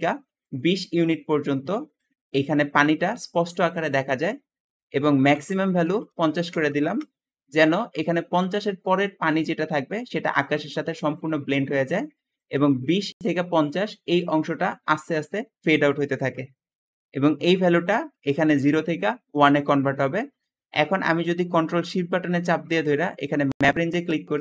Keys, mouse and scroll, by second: 4.5 Escape, 5.8 5, 6.3 KP_0, 6.7 Return, 6.9 Return, 6.9 0, 8.3 click, 16.7 Escape, 16.7 Escape, 20.2-20.8 scroll down 4, 21.4 scroll up 2.